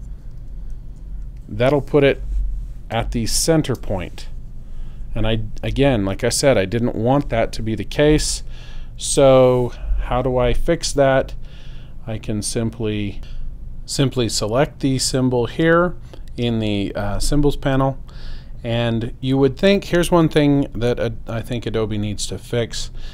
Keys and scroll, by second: 0.4 0, 0.9 Return, 2.9 space, 8.0 space.